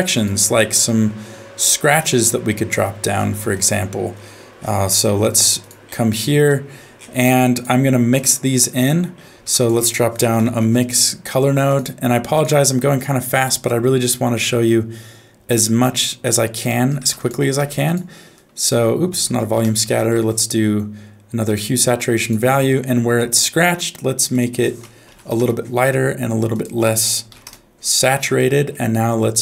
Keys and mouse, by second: 0.1-3.7 drag, 5.1 g, 6.5 middle click, 7.2 click, 7.4 click, 8.1 click, 9.4 shift+a, 12.8 middle click, 13.4 middle click, 14.3-16.3 drag, 16.7 middle click, 17.0 shift+a, 19.1 x, 19.4 shift+a, 24.4 click, 26.6 click, 28.3 middle click.